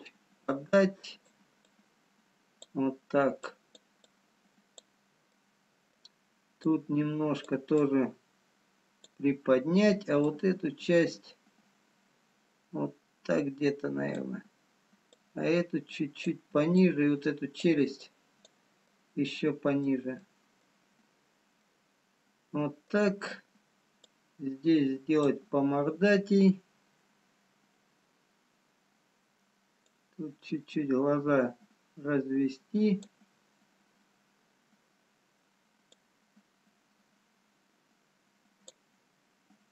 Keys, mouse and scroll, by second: 0.8 click, 3.1 click, 5.5 click, 5.5 middle click, 6.7 click, 8.0 click, 15.3 click, 17.1 click, 18.9 click, 18.9 middle click, 20.2 middle click, 23.1 middle click, 24.2 click, 30.0 click, 36.2 click.